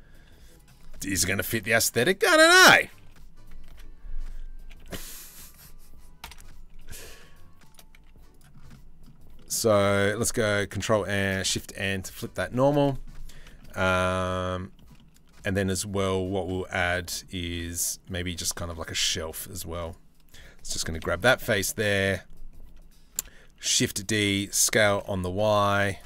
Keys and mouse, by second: 0.5 s, 2.6 h, 3.3 ctrl+z, 4.2 g, 5.8 ctrl+l, 6.3 g, 7.5 z, 8.3 click, 8.9 click, 10.4 ctrl+l, 11.0 shift+n, 15.6 middle click, 16.4 middle click, 17.6 middle click, 18.2 3, 18.6 z, 19.5-20.6 middle drag, 20.6 KP_7, 20.8 z, 22.7 shift+d, 23.8 s.